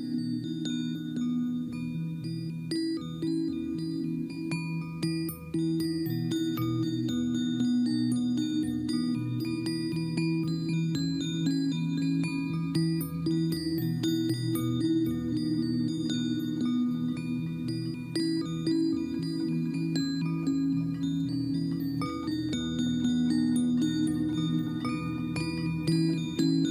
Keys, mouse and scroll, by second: 0.6 ctrl+-, 0.9 ctrl+-, 2.0 ctrl+t, 2.4 ctrl+click, 17.2 ctrl+=, 17.5 ctrl+=, 18.4 ctrl+t, 23.7 click.